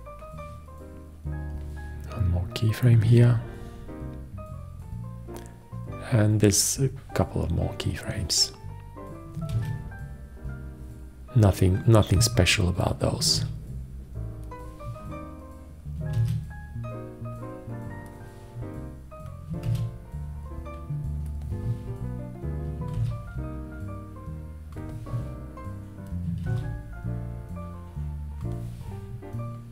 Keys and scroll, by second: 3.3 ctrl+`, 9.8 ctrl+`, 13.6 ctrl+`, 16.4 ctrl+`, 19.9 ctrl+`, 23.2 ctrl+`, 26.7 ctrl+`.